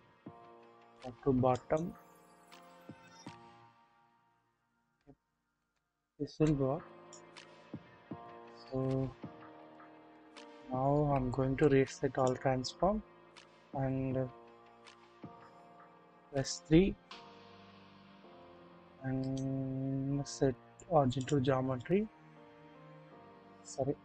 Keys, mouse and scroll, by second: 1.5 click, 2.4-4.9 drag, 4.9 typing, 5.6 alt+z, 6.5 click, 7.3-8.3 scroll up 1, 9.8 click, 9.8 scroll down 1, 10.2 double click, 11.3 ctrl+a, 14.1 scroll down 1, 14.7 typing, 16.1 typing, 18.0-18.5 shift+middle drag, 19.2 right click, 19.2-21.3 drag, 22.7 click, 23.9 ctrl+z.